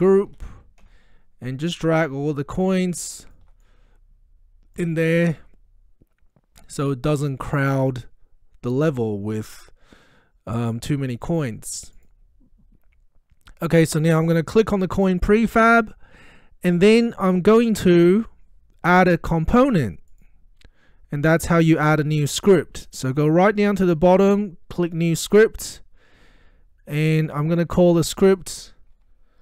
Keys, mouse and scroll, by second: 0.0-1.1 typing, 1.9-7.3 drag, 11.2 click, 14.8 click, 20.1 click, 23.1-24.2 drag.